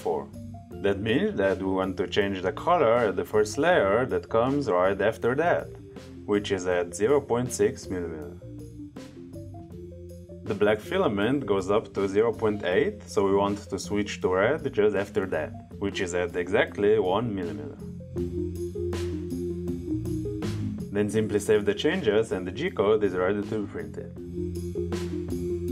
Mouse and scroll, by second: 2.9 click, 3.9 click, 10.0 click, 13.3 click, 14.7 click, 16.0 click, 17.1 click, 22.8 click.